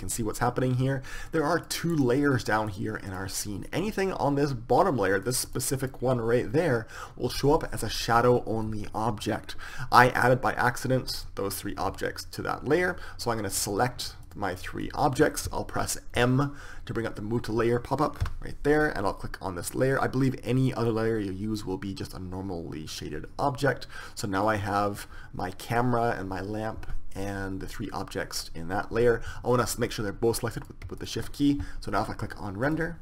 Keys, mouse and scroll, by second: 1.7-5.1 drag, 5.4-7.7 drag, 13.7-16.8 right drag, 16.4 m, 18.4 m, 24.5-26.5 drag, 29.7-33.0 drag.